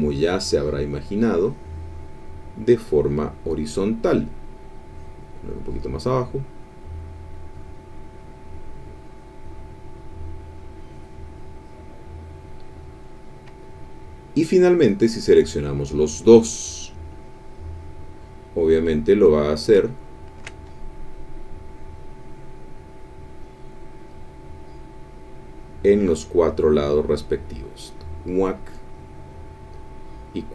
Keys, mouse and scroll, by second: 1.0-2.4 drag, 2.5 middle click, 4.8 click, 6.4-9.4 drag, 10.8-11.9 drag, 12.4 middle click, 13.2 middle click, 14.1 middle click, 15.4 click, 16.8-19.7 drag, 19.9 ctrl+click, 21.4-28.0 drag, 29.0-30.5 drag.